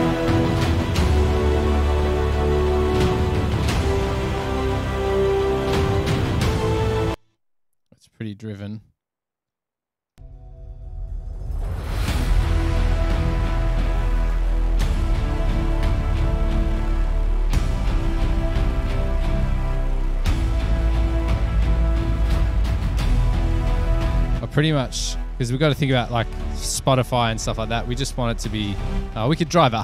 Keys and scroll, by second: 7.4 space, 10.4 space.